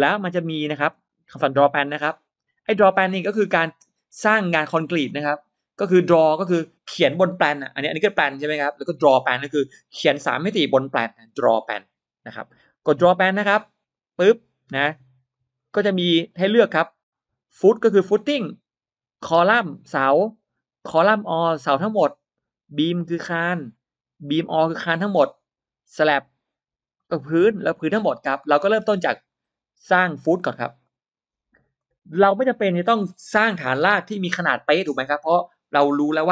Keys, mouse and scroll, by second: 4.9 click, 7.3 scroll down 1, 7.7-8.1 scroll up 1, 13.8 click, 15.2 click, 16.1 click, 30.7 click.